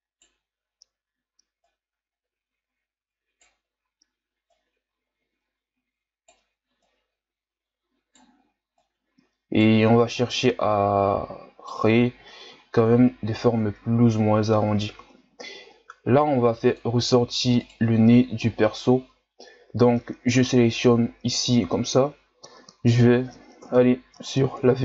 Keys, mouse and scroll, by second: 1.6 right click, 4.5 right click, 6.8 right click, 8.8 right click, 10.4 right click, 11.9-12.6 scroll down 3, 12.7 shift+scroll down 2, 13.0-14.1 scroll up 4, 14.1-16.0 ctrl+scroll down 2, 16.0 ctrl+Tab, 17.7 right click, 18.5-21.5 scroll down 1, 23.6 KP_3, 24.3-24.8 ctrl+scroll down 2.